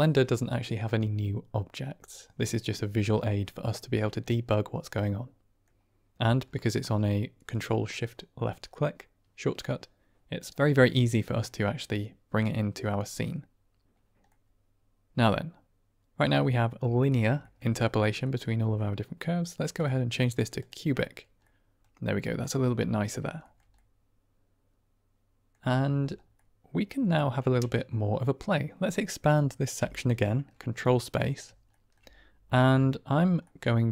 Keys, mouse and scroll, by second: 3.9-5.5 middle drag, 7.5 click, 14.2-16.2 middle drag, 17.3 shift+middle drag, 18.2 middle click, 19.8-20.6 drag, 21.3-21.7 middle drag, 22.3-23.0 middle drag, 23.3 shift+middle click, 23.7-25.4 middle drag, 26.2-27.1 drag, 29.7 ctrl+space, 30.8-31.3 drag, 31.6 shift+drag, 32.5-32.8 drag, 33.4 drag, 33.6 middle click.